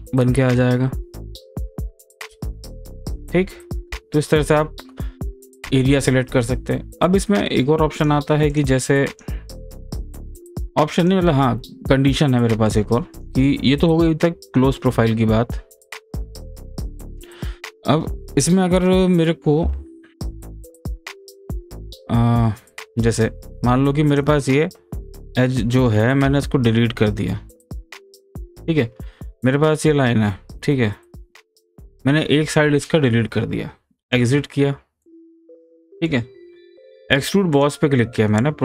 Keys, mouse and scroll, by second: 3.3 click, 3.4 ctrl+z, 8.0 click, 11.3 click, 13.2 click, 14.0 click, 16.1 click, 16.7 click, 17.8-18.5 scroll down 1, 19.8-20.2 scroll up 1, 20.2-21.1 scroll down 1, 21.5 scroll up 1, 21.9 scroll down 1, 22.0-22.7 scroll up 1, 22.7 scroll down 1, 24.1 click, 27.8 click, 34.1 click, 35.0-37.5 middle drag, 37.5 click.